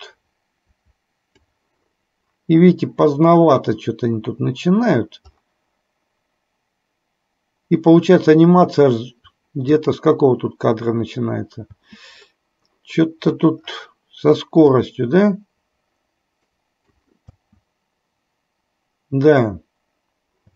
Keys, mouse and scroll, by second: 9.8 click, 11.8 space, 14.8-17.1 drag, 17.4 space.